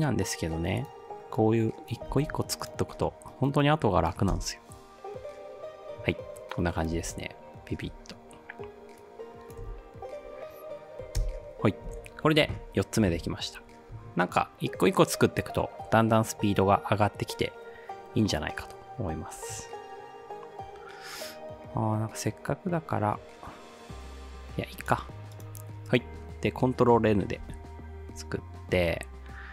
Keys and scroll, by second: 2.2 ctrl+v, 4.4 space, 7.0 space, 9.7 space, 11.2 space, 11.9 ctrl+s, 27.4 ctrl+n.